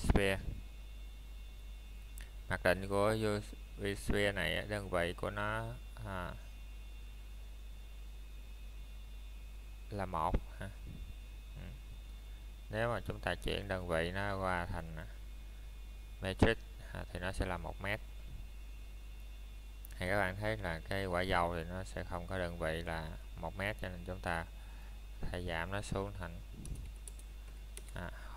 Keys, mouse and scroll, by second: 1.2 middle click, 1.6-2.1 scroll up 1, 2.1 middle click, 3.5 shift+middle click, 4.5 shift+a, 7.4 click, 15.2 middle click, 18.7 middle click, 19.1 scroll up 1, 19.9 middle click, 21.4 click, 27.4 middle click, 27.5 middle click.